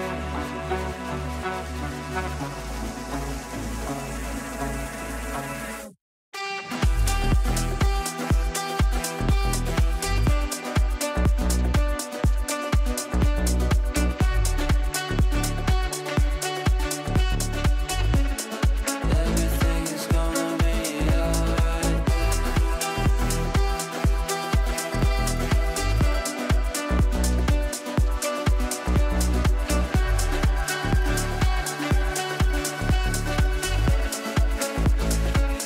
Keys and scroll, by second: 27.8 ctrl+z, 35.1 Delete.